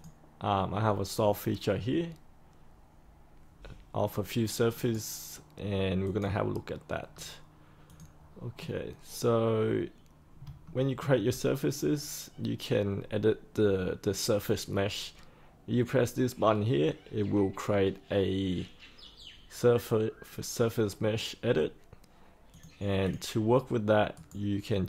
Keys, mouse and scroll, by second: 4.7 right click, 6.0 click, 7.0 scroll up 1, 7.8 click, 8.5-10.4 scroll down 1, 10.6 shift+middle click, 11.3-11.9 scroll down 1, 11.9-13.6 scroll up 1, 13.6-21.6 scroll down 1, 22.5 click, 24.1 right click.